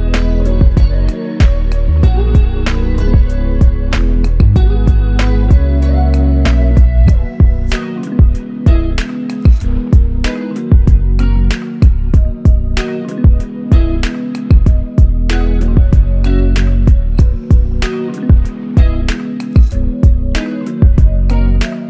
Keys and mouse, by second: 3.4 ctrl+alt+click, 5.5 shift+click, 8.7 typing, 9.4 ctrl+alt+click, 10.6 typing, 19.5 double click.